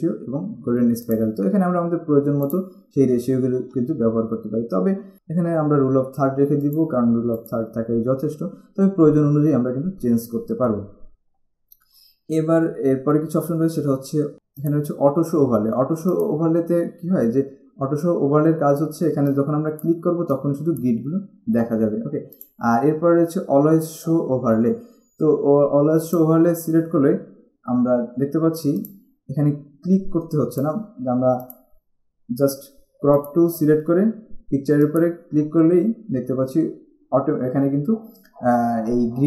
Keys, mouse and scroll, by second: 1.3 click, 2.7 click, 6.9 click, 14.3 click, 16.2 click, 19.4 click, 22.6 click, 26.3 click, 29.0 click, 30.8 click, 33.3 click, 35.0 click.